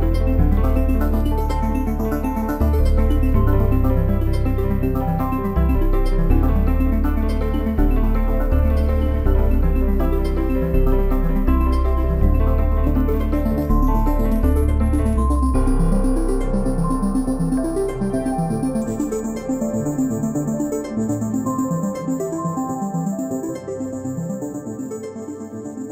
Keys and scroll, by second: 5.5 ctrl+j, 21.3 ctrl+g.